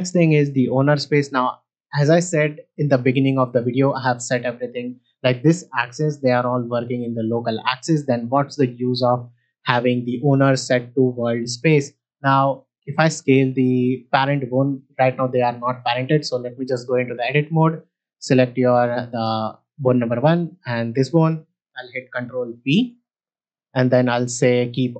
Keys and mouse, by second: 13.1 s, 13.9-14.7 right drag, 15.7 Tab, 16.5 click, 17.4 middle click, 22.6 ctrl+p.